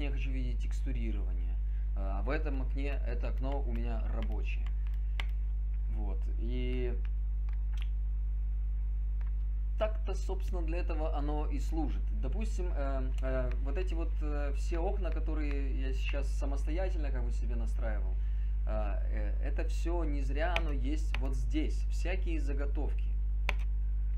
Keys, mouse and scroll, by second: 2.8 right click, 4.1 right click, 4.7 right click.